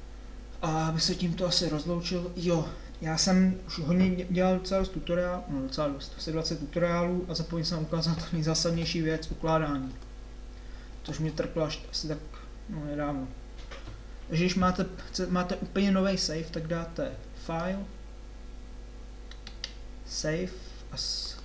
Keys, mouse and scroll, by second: 0.1 middle click, 0.9-3.1 middle drag, 8.8 KP_7.